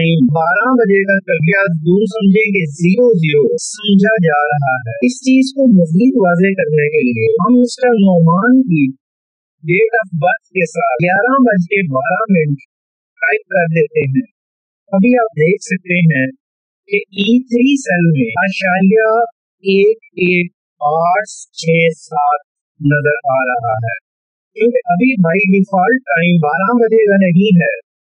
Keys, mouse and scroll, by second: 9.0 click, 12.3 space, 14.7 typing, 15.9-17.1 typing, 17.4 Return, 19.9 Up, 21.5 ctrl+1, 22.1 click, 24.2 click.